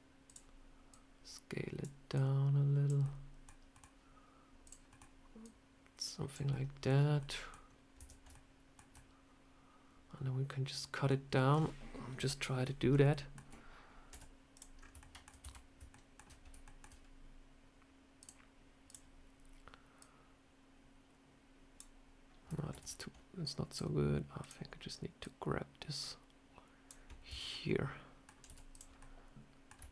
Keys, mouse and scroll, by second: 0.1 click, 0.8 click, 2.0 click, 2.9 middle click, 3.6 middle click, 4.5 click, 4.8 middle click, 5.3 click, 6.4 middle click, 6.8 scroll down 3, 7.1 middle click, 7.9 Tab, 8.2 shift+middle click, 8.8 middle click, 11.2 middle click, 12.1 KP_7, 12.9 shift+middle click, 12.9 shift+middle click, 14.0 z, 14.7 scroll up 3, 14.9 shift+middle click, 15.3 a, 15.8 shift+middle click, 16.1 shift+scroll down 1, 16.3-16.6 scroll up 2, 16.5 shift+middle click, 18.1 click, 22.6 ctrl+z, 23.6 click, 25.6 click, 27.2 Tab, 27.4 middle click, 28.4 z, 28.9 middle click, 29.8 shift+middle click.